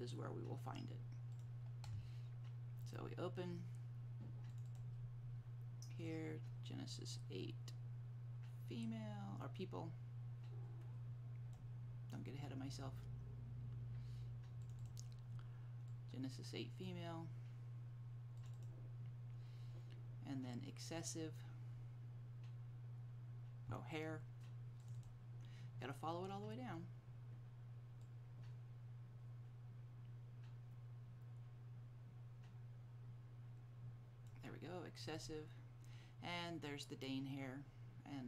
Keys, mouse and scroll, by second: 1.5 click, 4.8 double click, 6.2 click, 14.7 click, 14.9 double click, 16.0 click, 18.5 click, 18.7 double click, 20.6 click, 22.4 scroll up 1, 24.9 click, 25.1 double click, 35.1 click, 35.3 double click.